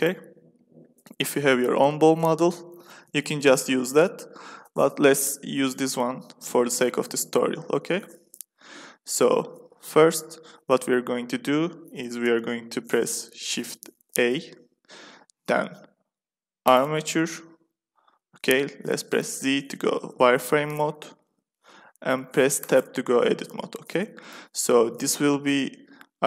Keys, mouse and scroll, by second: 0.0-1.6 drag, 1.7-4.0 middle drag, 6.7 Tab, 7.2 Tab, 7.6 z, 8.3-9.4 drag, 14.0 shift+a, 19.3 z, 19.9-21.4 middle drag, 22.5 Tab, 26.0-26.2 middle drag.